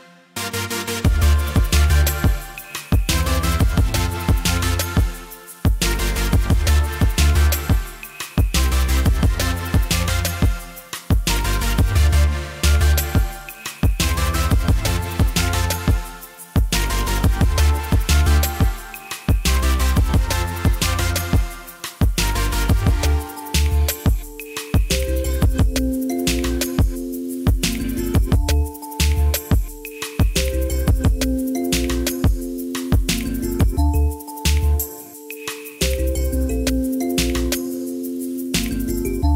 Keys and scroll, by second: 28.4 Delete, 32.4 0, 32.5 Return, 35.7-37.0 typing.